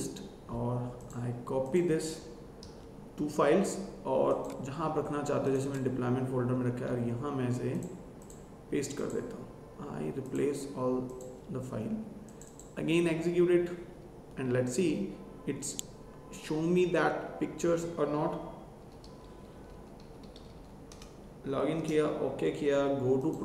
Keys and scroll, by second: 2.5 ctrl+c, 6.6 ctrl+v.